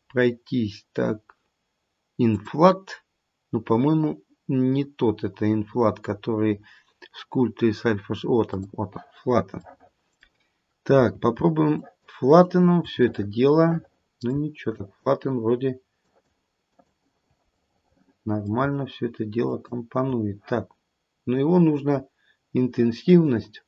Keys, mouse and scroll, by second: 2.4 click, 8.6 click, 9.5 middle click, 10.0 middle click, 11.8 shift+click, 12.4 shift+click, 14.7 shift+click, 16.0 shift+click, 16.6 shift+click, 17.5 middle click, 17.9 middle click, 19.4 shift+click, 21.6 click.